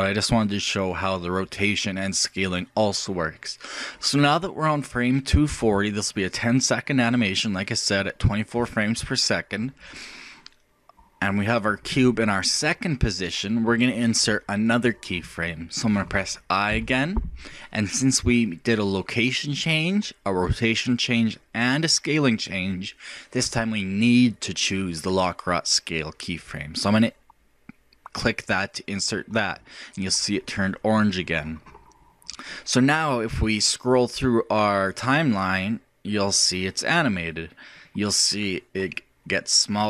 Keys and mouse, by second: 16.7 i, 33.9-35.8 drag.